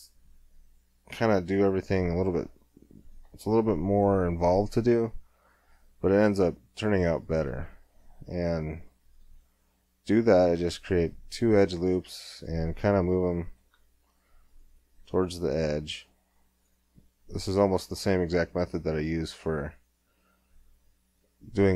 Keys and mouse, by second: 2.1-4.9 middle drag, 3.4 Tab, 5.5-6.5 middle drag, 7.5 ctrl+r, 10.4 s, 12.6 middle click, 13.6 ctrl+r, 15.0 s, 17.8 ctrl+r, 19.5 s.